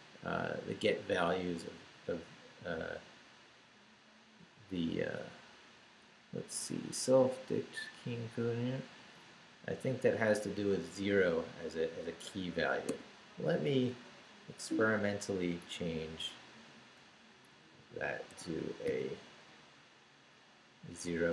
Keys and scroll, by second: 12.9 q, 14.6 Down, 15.0 Up, 15.6 Down, 16.0 Left, 17.5 Down, 20.5 Right.